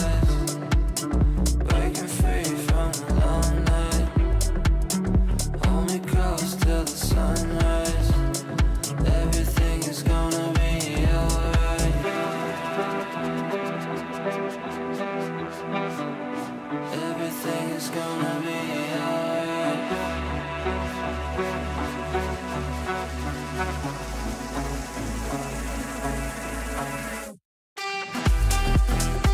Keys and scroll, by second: 4.7 ctrl+z, 19.1 shift+Page_Up, 24.7 ctrl+Page_Down, 25.9 ctrl+Page_Down.